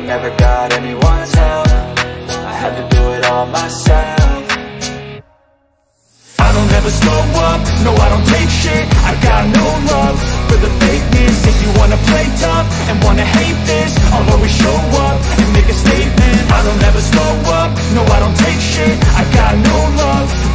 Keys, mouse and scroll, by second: 6.2 click, 11.7 click, 12.6 drag, 15.3-16.2 drag, 16.2 middle drag, 16.5-17.8 middle drag, 18.0-18.8 middle drag, 18.8-19.6 drag, 19.6 middle click, 20.4-20.5 middle drag.